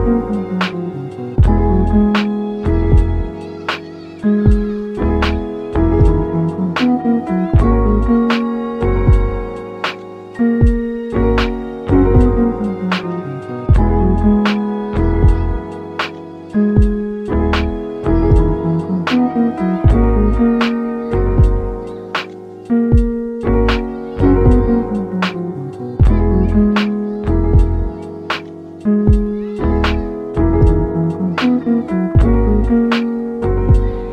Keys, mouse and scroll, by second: 3.6-4.7 drag, 4.3 KP_2, 4.5 KP_0, 4.7 KP_0, 5.2 Return, 8.6 scroll down 2, 8.9-10.4 middle drag, 10.4-11.6 scroll up 4, 11.6 click, 13.0 click, 13.3-13.6 scroll up 3, 13.6 shift+middle click, 13.9-14.3 scroll up 4, 14.3-15.3 shift+middle drag, 15.3 click, 16.1 click, 16.7-17.6 scroll down 4, 17.6-19.2 scroll down 4, 19.2-22.9 drag, 22.9 scroll up 2, 23.7-24.1 scroll up 6, 25.2-25.6 scroll down 4, 26.3 scroll down 3, 26.4 click, 26.8 click, 29.6 click.